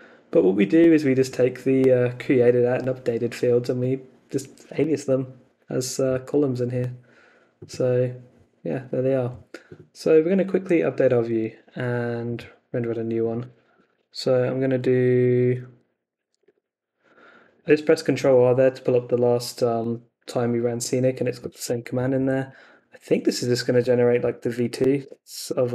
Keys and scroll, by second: 11.4 super+Tab, 13.7 Up, 15.1 ctrl+r, 15.6-17.0 typing, 17.4 Right, 21.9 Right, 25.0 Return.